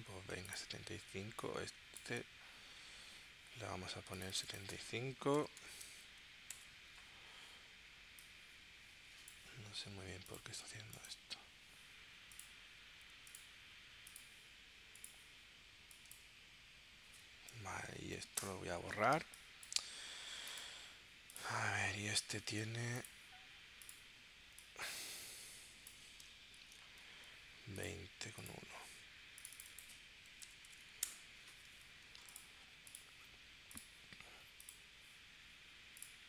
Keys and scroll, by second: 5.2-6.1 typing, 6.5 Return, 18.4 BackSpace, 19.2 space, 26.6 super+g, 30.1-31.3 typing.